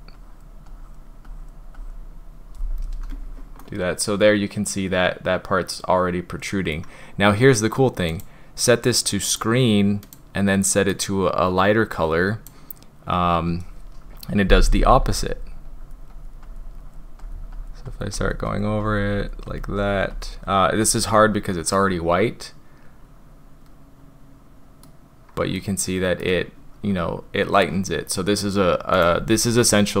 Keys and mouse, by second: 0.2 drag, 0.7 drag, 1.3 drag, 1.8 drag, 3.6-6.8 drag, 8.2-9.5 drag, 14.5 [, 14.8 [, 15.0 [, 15.7 drag, 16.1 click, 16.5 click, 16.8 drag, 17.2 click, 17.6 click, 17.9 click, 18.2 click, 18.5 click, 18.9 drag, 19.2 click, 19.5 click, 19.8 click, 20.2 drag, 21.8-24.9 middle drag, 25.6 middle click, 28.9-30.0 drag.